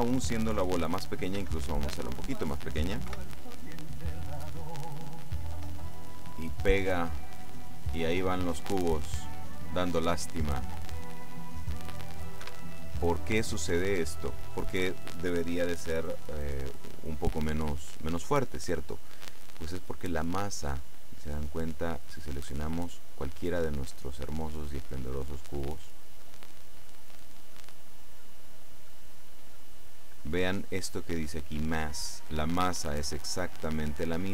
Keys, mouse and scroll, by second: 1.5 s, 2.2 click, 3.2 p, 12.5 Escape, 22.2 right click, 23.4 right click, 24.0 right click, 25.7 right click, 26.5-27.7 right drag, 27.9-29.2 right drag, 33.0-34.0 right drag.